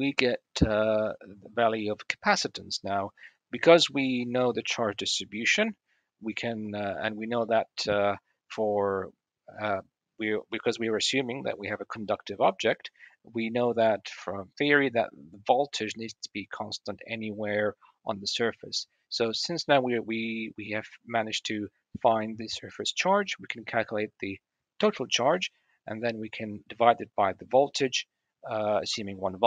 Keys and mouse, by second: 0.3-8.3 middle drag, 13.6 middle drag, 14.7-18.6 middle drag, 21.0-21.4 drag, 21.4 middle click, 25.2-25.9 middle drag.